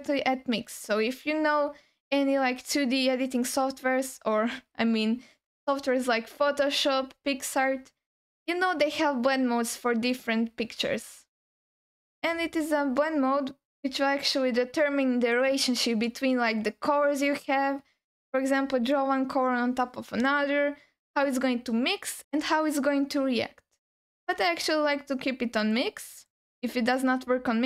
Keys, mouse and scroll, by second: 10.1-25.8 drag, 26.1-27.6 drag.